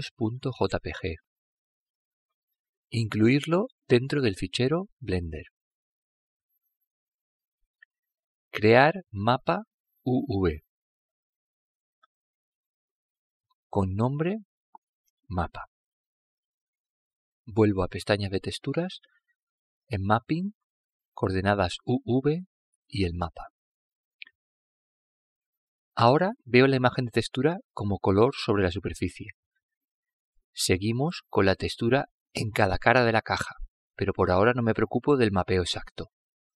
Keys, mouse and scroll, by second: 0.5 click, 4.0 click, 7.8-13.1 drag, 15.7-19.9 drag, 20.5 click, 22.8 click, 25.0-27.5 middle drag, 27.9 click, 33.6-35.4 middle drag.